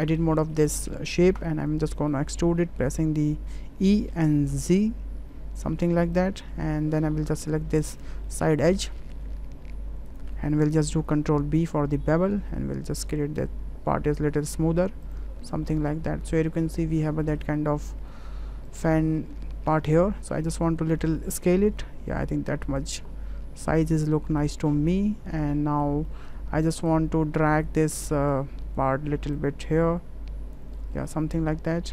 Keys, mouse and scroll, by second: 0.0 Tab, 0.5 shift+middle click, 1.4 a, 2.1 middle click, 3.7 e, 8.2 middle click, 8.9 shift+middle click, 11.1 ctrl+b, 15.8 click, 16.0 Tab, 16.3-17.0 drag, 17.3 shift+click, 17.6 drag, 18.1 `, 21.0 s, 23.9 ctrl+a, 25.3-26.2 middle drag, 26.9 click, 28.3 click, 29.4-30.5 drag, 30.8-31.1 drag, 31.1 middle click.